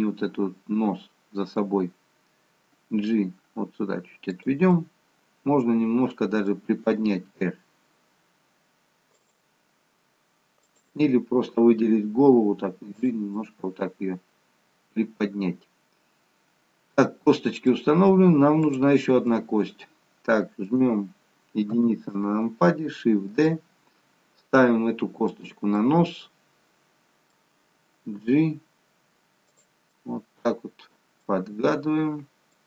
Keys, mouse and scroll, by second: 4.8 middle click, 7.3 r, 10.8 click, 12.3 g, 13.5 middle click, 18.7 click, 19.3 middle click, 22.4 KP_1, 23.4 shift+d, 25.8 middle click, 28.2 g, 30.1 middle click, 31.6 g.